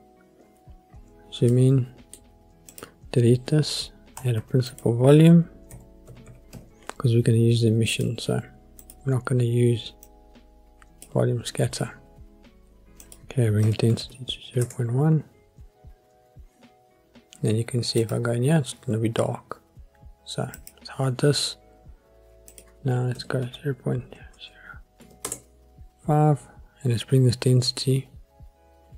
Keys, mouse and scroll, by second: 0.6-1.5 scroll up 2, 1.5-2.1 middle drag, 1.5-2.1 scroll up 1, 2.7 click, 3.5 Delete, 4.4 shift+a, 10.0-11.0 drag, 13.0-14.6 drag, 16.0-18.6 scroll up 2, 18.6 click, 20.5 click, 22.5-25.3 drag, 24.3 KP_0.